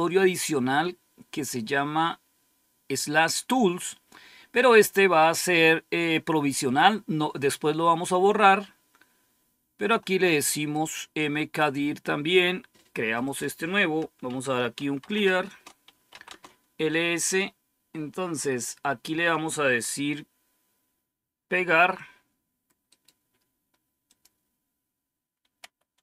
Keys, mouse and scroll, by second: 8.3-9.8 drag, 10.6 right click, 11.5 click, 13.1 click, 14.0-16.3 typing, 22.8 right click, 23.9 click, 24.4 click, 25.5 Right.